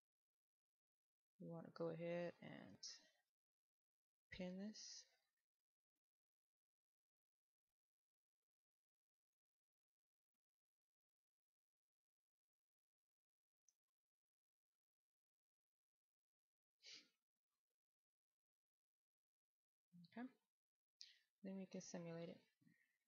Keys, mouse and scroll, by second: 0.0-0.7 scroll down 1, 0.7 middle click, 2.9-3.6 w, 3.8 click, 4.6 click, 4.6 w, 5.0 w, 5.1 right click, 5.8-6.2 scroll up 1, 6.2 right click, 7.7-8.2 scroll up 1, 8.2 right click, 9.0 middle click, 9.5 right click, 10.7 w, 11.2 w, 13.1 w, 13.3 click, 13.6 w, 13.9 right click, 14.7 middle click, 15.8-16.3 scroll down 1, 16.3 right click, 17.0-18.2 scroll down 1, 18.2 right click, 19.2-19.7 scroll up 1, 19.7 middle click, 20.7-22.1 scroll down 1, 22.1-23.0 drag.